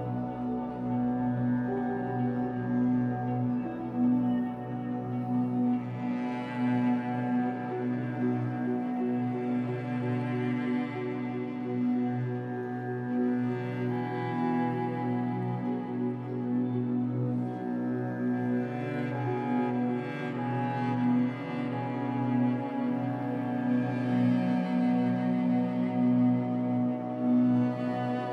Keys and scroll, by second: 14.0 ctrl+t.